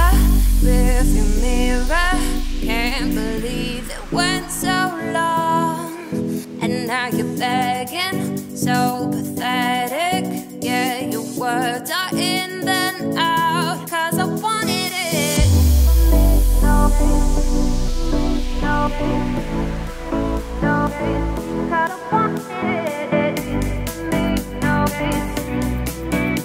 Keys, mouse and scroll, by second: 4.0 scroll down 1, 4.0-7.1 middle drag, 8.4 click, 10.5 click, 11.9 click, 12.1-15.1 drag, 16.0-18.2 drag, 18.8 click, 19.3-22.4 drag, 23.7 click, 25.8-26.4 middle drag.